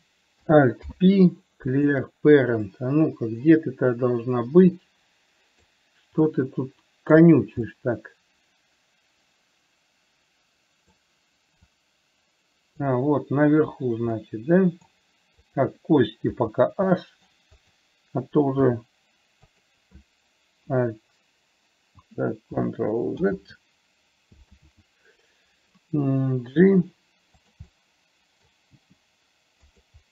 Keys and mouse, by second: 1.1 alt+p, 3.0-6.0 middle drag, 6.6 click, 8.1-11.3 middle drag, 12.1-13.1 drag, 14.5 middle click, 15.8 click, 16.6 h, 17.3 middle click, 18.1 click, 19.0 h, 19.8 click, 23.6 ctrl+z, 27.0 g, 28.0 middle click, 29.1 g.